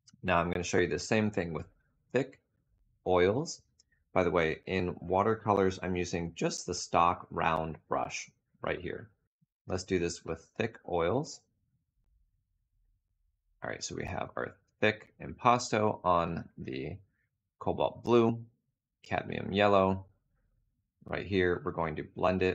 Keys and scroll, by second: 11.1 2.